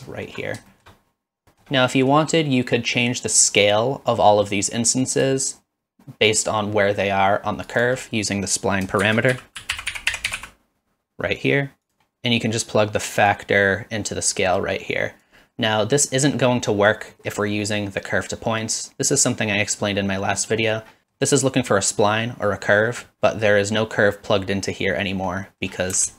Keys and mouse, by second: 0.1 shift+middle drag, 0.7 shift+middle click, 1.4 shift+middle click, 1.9 middle click, 5.5-7.8 shift+drag, 8.3 click, 9.0 shift+a, 9.6 s, 13.4-15.3 drag, 16.8 middle click, 20.5 middle click, 21.0 middle click, 22.8 middle click, 23.3 middle drag.